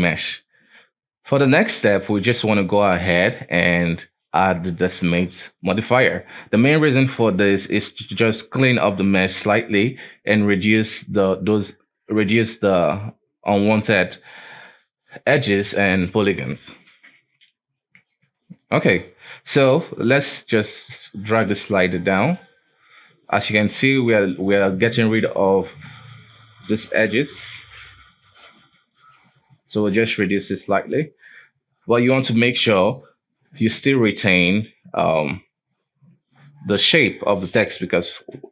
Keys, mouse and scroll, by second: 0.4-1.9 scroll down 1, 1.9-5.1 drag, 18.0-18.3 scroll down 2, 18.3-18.8 shift+middle drag, 18.8-20.1 scroll up 2, 20.1-23.2 drag, 23.8 shift+middle click, 24.0-26.3 scroll up 5, 26.3 click, 27.1 click, 28.8 click, 29.7-30.9 drag, 30.9-31.2 scroll down 3, 31.2-32.7 shift+middle drag, 32.7-33.7 scroll up 3, 33.7-35.2 scroll down 1, 35.2-37.3 drag, 37.3-37.7 scroll down 2, 37.7 alt+a.